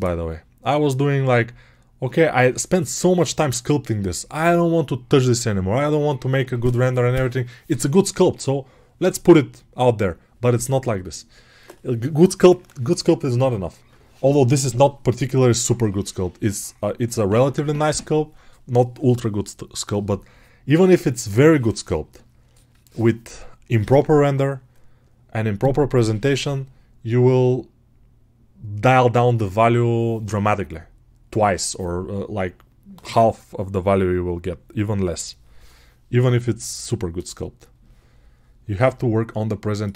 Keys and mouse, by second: 19.9-39.9 right drag.